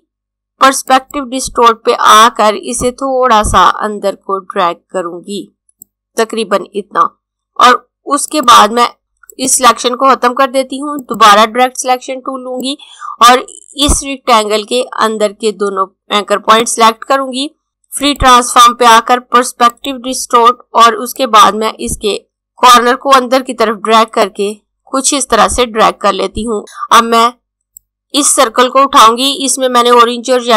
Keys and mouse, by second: 8.3 click, 26.6 click.